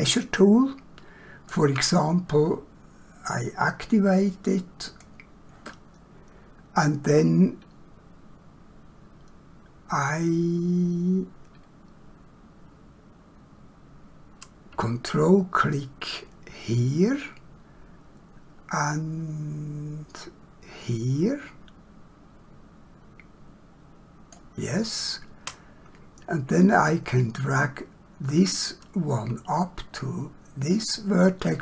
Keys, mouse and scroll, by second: 4.9 click, 27.1 click.